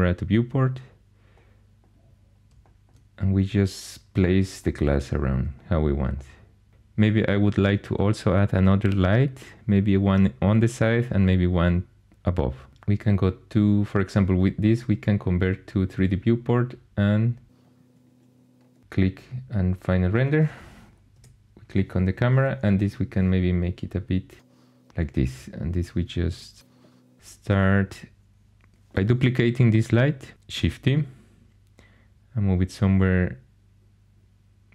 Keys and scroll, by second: 21.1 0, 30.5 shift+d.